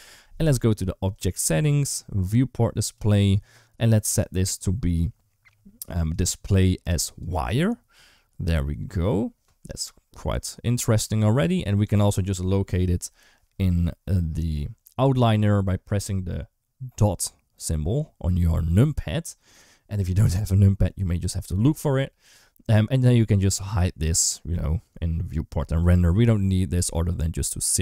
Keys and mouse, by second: 2.7 click, 5.9-7.1 drag, 12.8 KP_Decimal, 24.7 click.